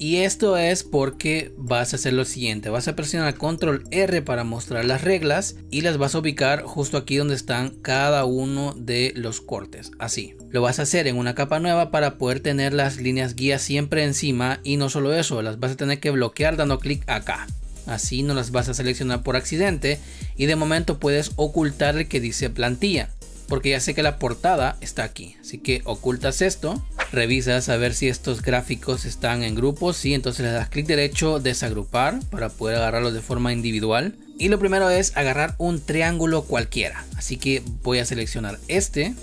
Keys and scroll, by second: 2.0 space, 3.1 ctrl+r, 4.6 ctrl+r, 5.6 ctrl+z.